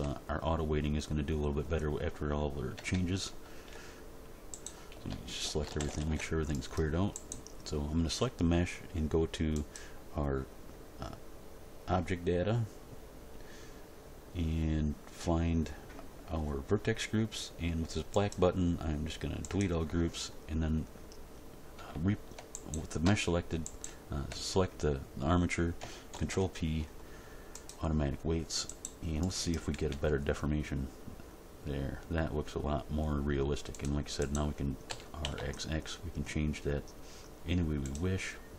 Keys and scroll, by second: 2.7 a, 4.9 a, 5.6 alt+r, 5.8 alt+g, 6.0 alt+s, 26.1 ctrl+p, 29.9 g, 34.8 r, 35.2 x.